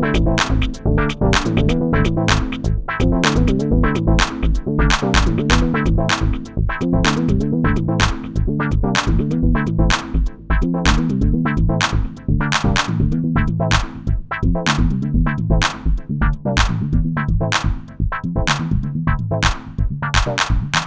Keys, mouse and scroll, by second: 4.5 Tab, 5.5 shift+z, 15.2 shift+z.